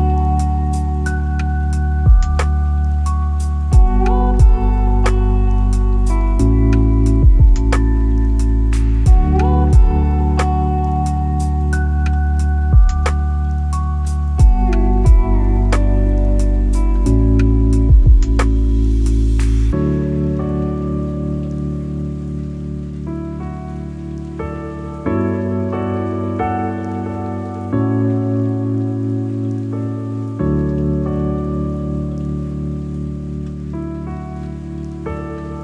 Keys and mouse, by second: 1.4 g, 1.8 z, 3.6 g, 3.9 x, 5.7-6.2 drag, 5.9 middle drag, 6.8 click, 7.8 g, 8.0 y, 12.8 click, 16.6-16.9 shift+drag, 17.5 g, 17.8 y, 21.2-22.2 middle drag, 22.4-23.6 middle drag, 25.0-26.2 drag, 29.3-30.2 middle drag, 30.8 click, 31.6 shift+click, 32.4 click, 33.0 g, 33.3 y, 34.5 click, 35.4-35.6 middle drag.